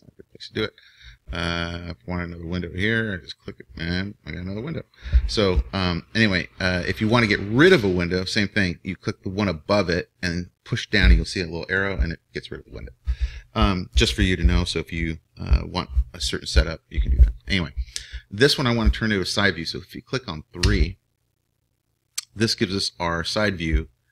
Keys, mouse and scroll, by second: 3.3-5.9 drag, 9.8-11.7 drag, 20.5 KP_3, 23.8 KP_3.